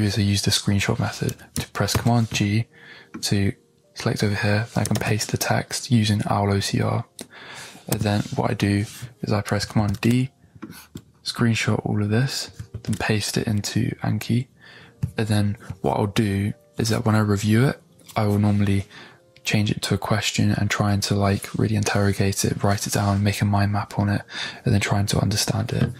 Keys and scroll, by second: 1.9 super+g, 4.9 super+v, 7.9 Tab, 9.8 super+d, 12.7 super+v.